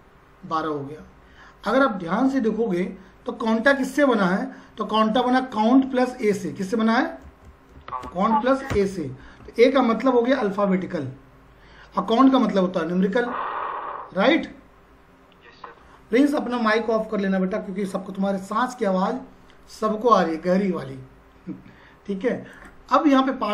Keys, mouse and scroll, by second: 5.3 click, 7.2 space, 7.9 shift+=, 8.1 shift+space, 8.7 Return, 22.5 click.